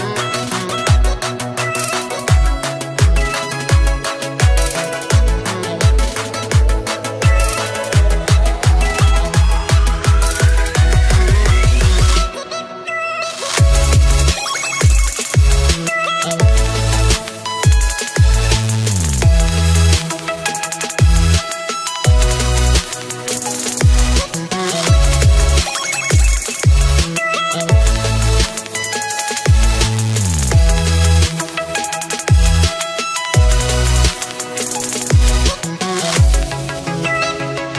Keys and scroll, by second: 32.3 ctrl+a.